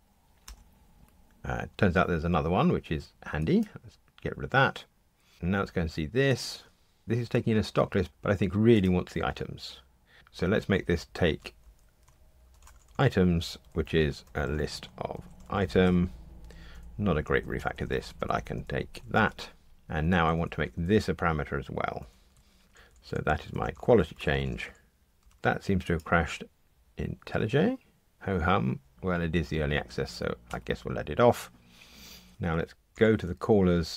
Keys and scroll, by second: 14.2 alt+shift+Right, 15.9 Escape, 19.0 alt+shift+Left, 19.1 BackSpace, 22.4 alt+super+p, 32.3 Escape, 33.0 super+b.